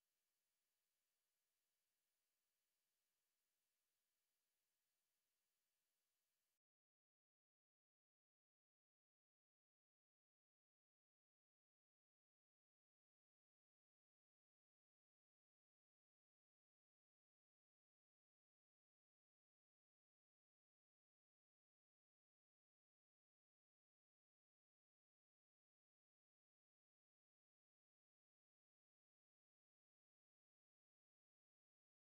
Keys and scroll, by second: 1.2-4.7 typing, 6.4 alt+shift+F9, 26.6 alt+shift+F9.